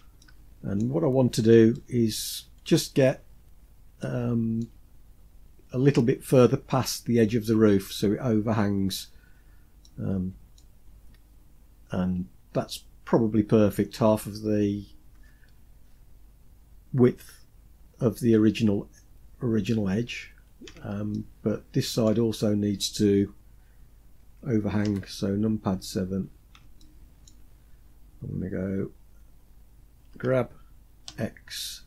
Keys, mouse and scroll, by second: 0.8-1.4 scroll up 3, 1.4-2.0 shift+middle drag, 2.8-3.2 scroll up 2, 3.7-4.4 shift+middle drag, 8.6-9.5 scroll down 5, 9.5-10.2 middle drag, 10.4 scroll down 2, 10.5 scroll up 1, 19.0-19.6 scroll down 3, 20.8 shift+middle click, 24.5 KP_7, 25.4-26.1 scroll up 4, 26.4-26.9 shift+middle drag, 27.0-27.5 scroll up 3, 29.7 g.